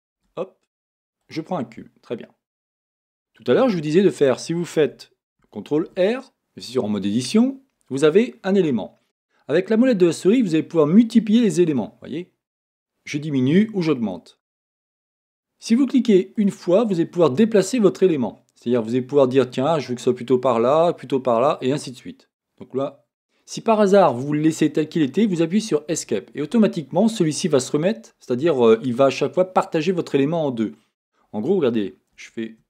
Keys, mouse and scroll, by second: 0.1 shift+a, 3.8 Tab, 4.8 a, 5.8 ctrl+r, 26.0 Escape, 28.3 middle click, 32.1 z.